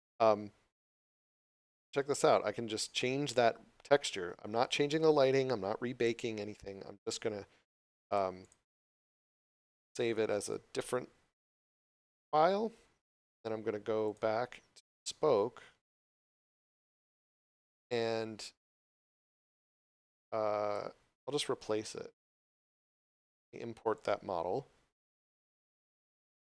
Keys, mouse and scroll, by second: 1.6 click, 8.4 click, 9.6 2, 9.8 Return, 14.0 click, 19.2 click, 21.3 scroll up 1, 23.9 click.